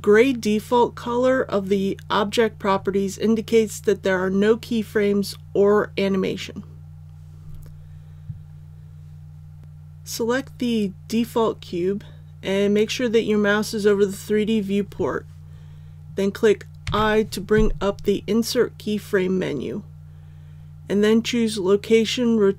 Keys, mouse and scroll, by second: 9.6 click, 16.8 i.